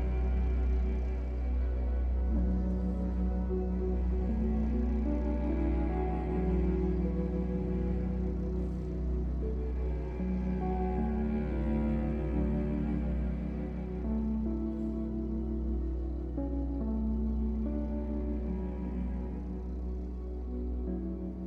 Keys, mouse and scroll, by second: 0.1 Tab, 0.8 scroll up 1, 1.9 click, 2.5 middle click, 2.9 click, 3.8-4.5 scroll up 2, 4.0 middle click, 4.5 shift+click, 5.0 x, 6.7-8.3 middle drag, 7.1 scroll down 2, 8.3-10.6 drag, 10.7 KP_1, 11.7 click, 13.2-13.5 scroll down 2, 13.5-15.5 shift+middle drag, 13.9-14.3 scroll up 2, 14.3 ctrl+r, 15.5 click, 17.6 b, 20.7 click, 20.8-21.2 scroll up 1, 21.2-21.4 middle drag.